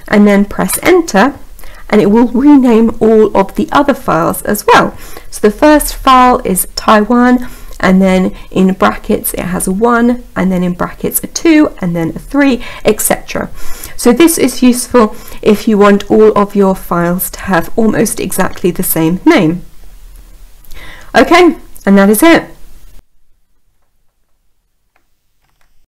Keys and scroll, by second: 0.0 Return.